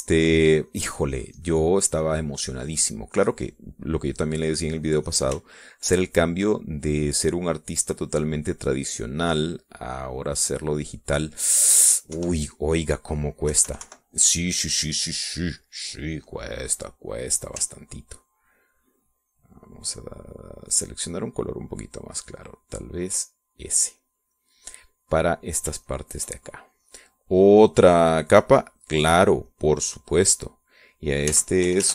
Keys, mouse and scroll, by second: 7.4-11.1 shift+drag, 11.2 click, 12.0 click, 12.7 middle click, 13.3 KP_5, 13.5 click, 14.1 click, 14.6 KP_Subtract, 15.3-16.9 drag, 19.7-24.8 ctrl+drag, 25.2 click, 25.9 click, 27.0 shift+click, 29.1 click, 29.6 click, 30.0 click, 30.6 click, 31.4 click.